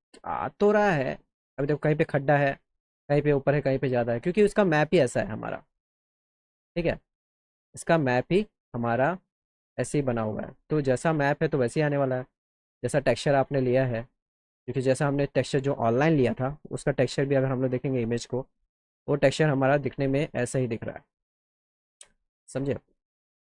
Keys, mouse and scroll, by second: 4.8-7.3 drag, 9.3 click, 17.0 click, 17.9 click, 23.0 click.